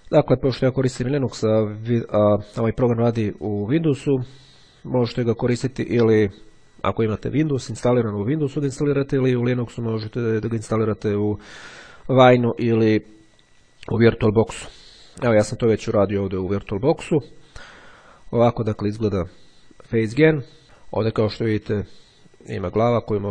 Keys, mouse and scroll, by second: 12.6-13.6 drag, 16.8-18.0 drag, 20.8-22.3 drag, 22.8-23.3 drag.